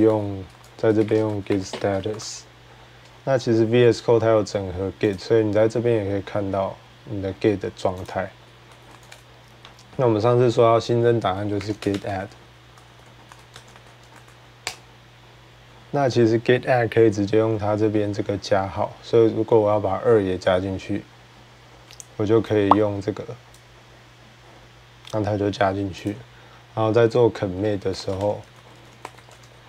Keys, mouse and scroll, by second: 0.0-3.4 typing, 4.9-8.9 typing, 5.0 click, 7.8 click, 10.9-13.5 typing, 11.2-12.9 drag, 14.0 Tab, 14.5 Return, 16.8-17.5 typing, 23.3 click, 25.9 click, 27.5-28.7 typing, 27.8 click, 28.2 click.